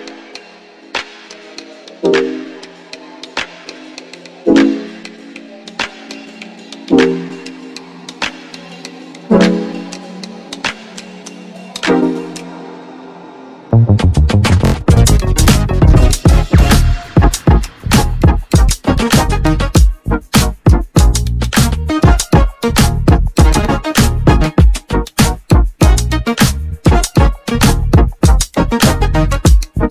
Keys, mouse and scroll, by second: 0.0 click, 0.6-3.2 drag, 4.4-22.8 drag, 24.0-24.7 scroll down 1, 24.7 click, 25.6 Delete, 26.9-27.3 scroll up 4, 27.3-27.7 scroll down 1, 27.7-29.9 shift+middle drag.